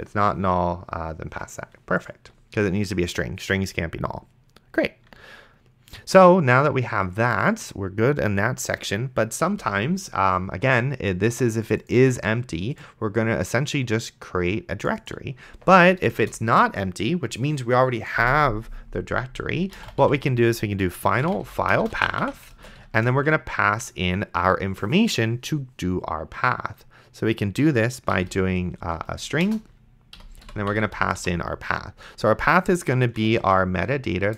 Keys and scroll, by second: 9.8 Return, 16.5 Return, 19.4-23.1 typing, 29.1-31.5 typing, 30.2 End, 32.9-34.1 typing.